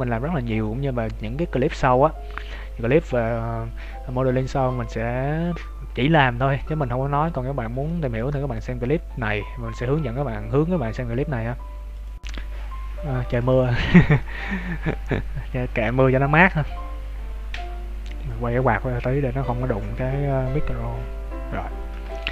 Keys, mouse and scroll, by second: 6.8 middle click, 13.8-14.2 scroll up 2, 14.2 shift+middle click.